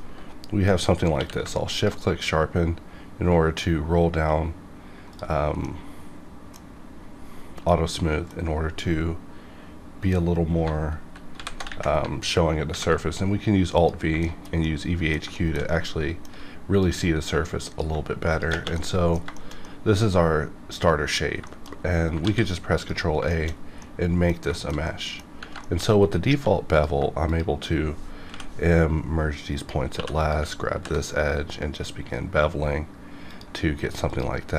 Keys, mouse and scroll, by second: 1.2 q, 1.7 shift+click, 2.2-4.2 scroll down 2, 4.2-4.7 scroll up 2, 4.7-5.1 scroll down 2, 5.1-5.6 drag, 5.6-11.3 middle drag, 10.6 alt+Num_Lock, 11.0 b, 11.3 alt+v, 12.7 alt+v, 13.7 click, 14.2-16.8 shift+middle drag, 16.8-18.3 drag, 18.7-21.2 middle drag, 21.2 scroll up 1, 21.4 shift+middle click, 21.8 scroll up 1, 22.2 ctrl+a, 22.9 click, 23.3 shift+middle click, 23.5 scroll down 1, 23.8-25.4 middle drag, 25.6 shift+middle click, 25.8-26.3 scroll up 2, 26.3 1, 26.7 click, 27.3 shift+click, 28.3 m, 29.6 click, 29.9 2, 30.2 click, 30.7 ctrl+b, 31.4-32.3 scroll up 1, 33.3 click, 33.6 scroll up 1, 34.1 click.